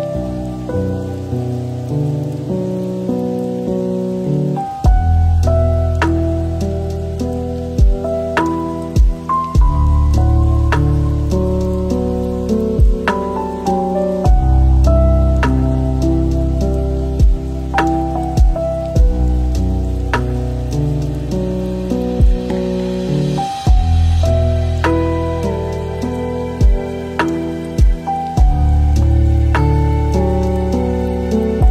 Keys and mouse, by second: 0.8 click, 1.4 shift+s, 4.9 r, 6.7 s, 9.2 g, 10.8 Tab, 11.4 alt+z, 11.9 shift+click, 12.1 e, 12.9 s, 13.6 e, 14.8-17.9 typing, 18.8 click, 19.8 g, 21.0 Tab, 22.0 middle click, 22.9 middle click, 23.5-25.2 drag, 26.4 click, 27.3 click, 28.6 click, 30.7-31.7 drag.